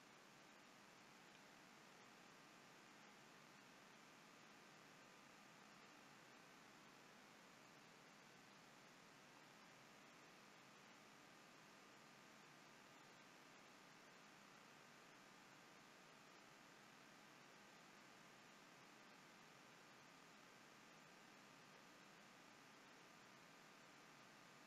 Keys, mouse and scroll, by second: 2.3-2.8 scroll down 2.